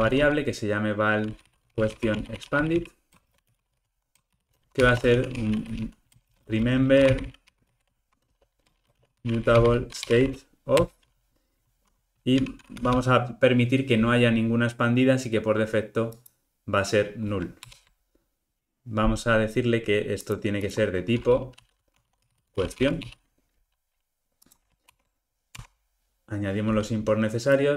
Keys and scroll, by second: 10.9 Return, 17.6 alt+Return, 24.9 alt+Return.